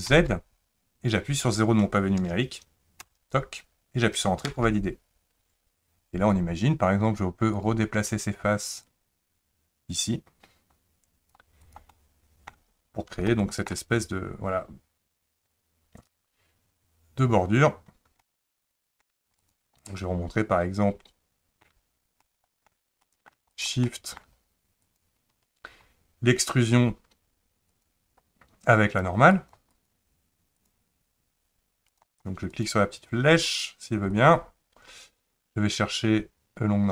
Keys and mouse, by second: 7.6-11.3 drag, 11.6 click, 11.9 middle click, 13.3 shift+middle click, 18.2 middle click, 19.4 click, 19.9-21.6 middle drag, 22.2 shift+middle click, 23.0 middle click, 23.6 shift+click, 23.8 middle click, 24.8 shift+click, 27.7 click, 28.7 click, 29.4 click, 29.8 click, 30.6 click, 32.6 click, 33.6 click, 34.1-36.9 drag.